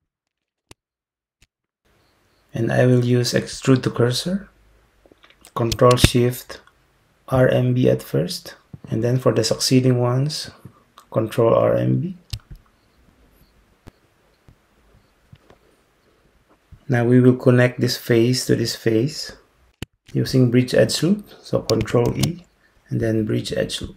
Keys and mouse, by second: 7.8 ctrl+shift+click, 22.1 ctrl+e.